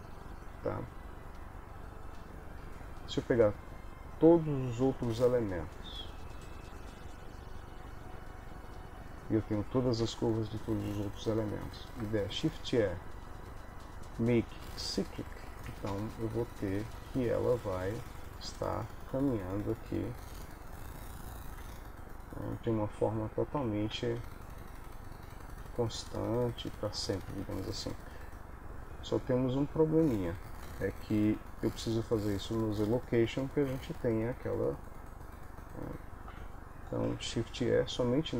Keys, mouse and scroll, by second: 5.1 ctrl+i, 10.1 Home, 12.4 shift+e, 15.8 space, 20.2 Escape, 20.8 ctrl+middle click, 27.5 Escape, 29.8 click, 33.7 Home, 36.4 a, 37.2 shift+e.